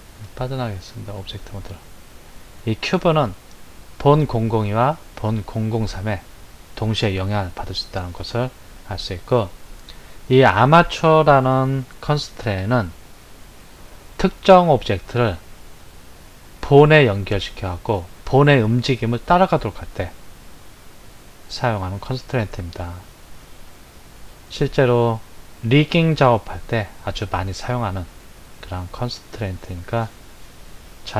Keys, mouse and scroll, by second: 0.2-1.7 drag, 2.5 click.